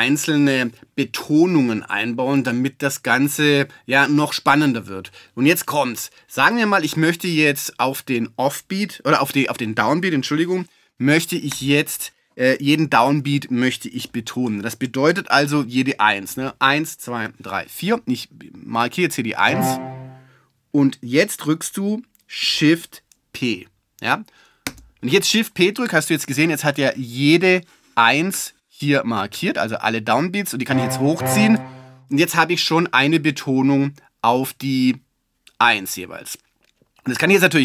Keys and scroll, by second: 24.7 shift+p.